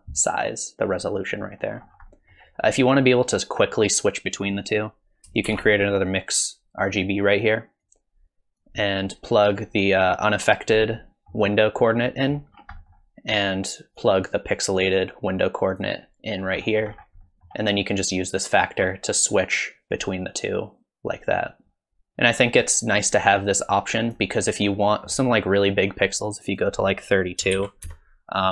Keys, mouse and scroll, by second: 1.8-3.2 scroll up 4, 2.1 middle click, 4.4 click, 5.5 shift+d, 7.8 click, 11.6 middle click, 12.0 middle click, 12.5-14.0 scroll down 3, 12.8 middle click, 14.0 click, 16.6-17.3 scroll up 8, 17.4 middle click, 18.6 click, 22.0-22.5 scroll down 5, 23.3 click, 24.8 middle click, 27.8 click.